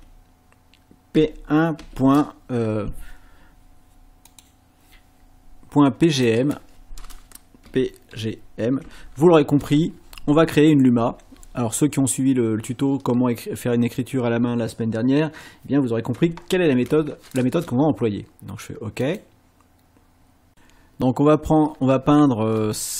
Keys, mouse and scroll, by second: 1.1 KP_1, 4.3 click, 6.2 click, 7.7 p, 8.1 g, 8.8 m, 19.0 click, 20.5 click.